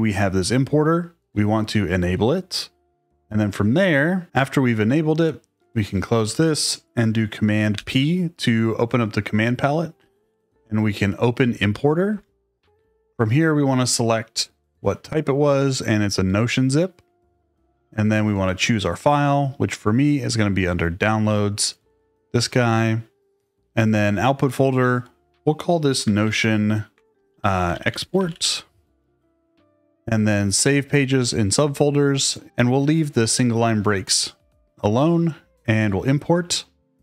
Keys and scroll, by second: 7.7 super+p, 9.7-10.8 typing, 12.0 Return, 26.2-28.9 typing.